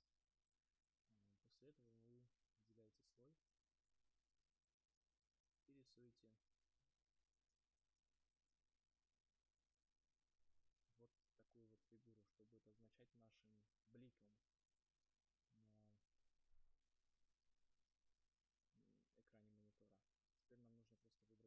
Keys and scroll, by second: 18.3 ctrl+z.